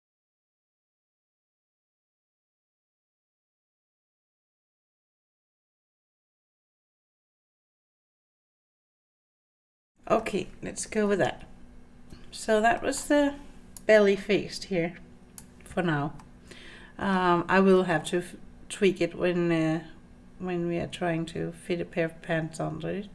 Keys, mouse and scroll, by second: 0.3 click, 0.3 g, 0.6 scroll down 3, 0.6 middle click, 1.3 scroll up 3, 1.4 click, 1.6-7.8 typing, 1.9 middle click, 2.4 scroll down 2, 2.5 middle click, 2.6 scroll up 3, 2.7 middle click, 2.9 click, 2.9 middle click, 3.6 middle click, 3.6 scroll down 1, 3.7 click, 3.7 scroll up 2, 4.2 scroll down 1, 4.3 middle click, 4.9 click, 5.3 middle click, 5.9 click, 6.4 click, 6.5 middle click, 7.0 middle click, 7.3 shift+click, 7.4 middle click, 8.0 click, 8.1 scroll up 3, 8.5-8.9 scroll down 6, 8.6 middle click, 9.3 middle click, 9.3 scroll down 1, 9.6 middle click, 10.2 middle click, 11.1 Tab, 12.8 shift+middle click, 13.8-15.4 drag, 16.2-17.2 middle drag, 17.9-23.1 middle drag.